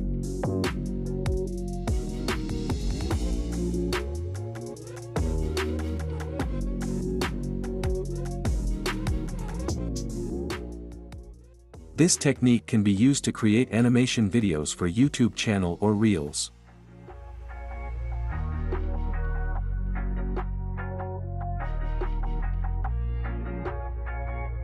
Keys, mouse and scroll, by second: 3.9 click, 6.4 space, 7.8 space, 12.5 click, 14.0-15.0 right drag, 15.5 click, 16.7-17.7 drag, 19.1 space, 21.9 space, 23.3-24.3 drag.